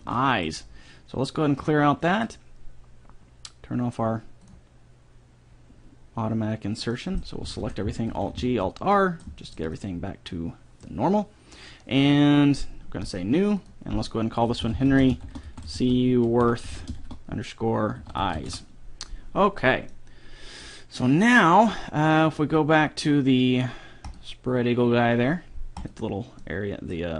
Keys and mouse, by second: 1.8-3.5 drag, 7.1 middle click, 7.8 a, 8.0 a, 8.4 alt+g, 8.6 alt+r, 13.2-15.6 drag, 20.2 middle click, 22.7-24.2 middle drag, 24.2-27.1 drag, 26.6-27.1 middle drag, 26.6-27.1 right drag.